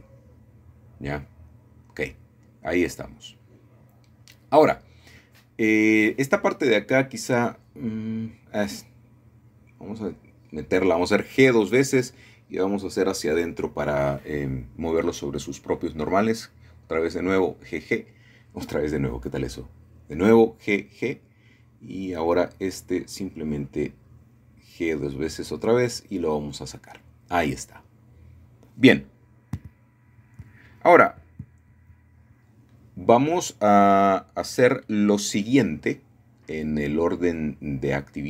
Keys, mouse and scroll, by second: 0.8 shift+middle click, 4.3 typing, 6.2-7.2 alt+shift+drag, 7.9 middle click, 9.4-9.9 typing, 15.4 shift+click, 15.5-16.3 typing, 17.6-18.7 alt+shift+drag, 22.1-23.1 drag, 24.6 alt+shift+click, 25.6 typing, 27.3-28.4 drag, 27.8-28.9 scroll down 1, 29.1 middle click, 29.5-31.7 scroll down 1, 31.1 typing, 31.2 shift+middle click, 36.1 shift+middle click, 37.5 shift+middle click.